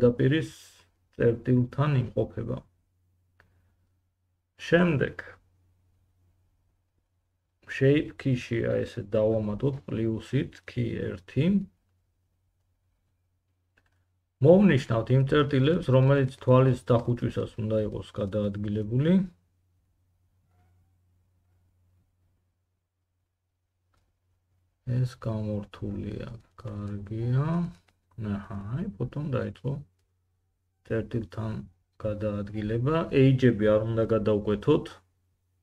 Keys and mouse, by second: 2.6-19.1 middle drag, 12.6 Tab, 19.1-25.3 drag, 24.8 Escape, 25.3-27.8 middle drag, 28.8 g, 34.5-35.5 drag, 35.5-35.6 drag.